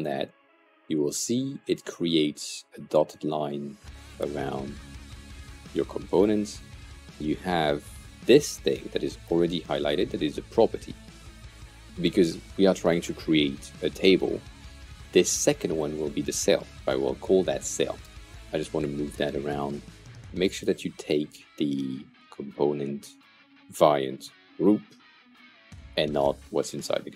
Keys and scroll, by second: 15.7 shift+c, 16.3 e, 16.6 l, 17.9 Return.